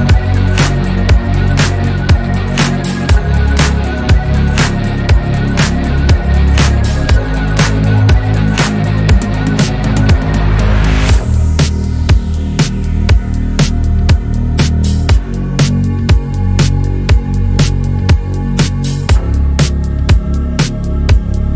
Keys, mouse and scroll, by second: 0.5-1.4 shift+middle drag, 1.4 Tab, 2.2 z, 2.6 click, 3.2 click, 5.2 Tab, 5.3 drag, 5.6-6.0 scroll down 9, 6.1-6.7 shift+middle drag, 6.7 z, 8.2 click, 9.2 alt+z, 9.4 click, 9.7 scroll down 2, 9.9-11.1 middle drag, 11.1 scroll up 1, 11.4-12.6 shift+middle drag, 13.0-14.0 middle drag, 14.0 KP_3, 14.8-15.6 shift+middle drag, 15.6 click, 16.2 scroll up 2, 17.3 s, 20.4 s.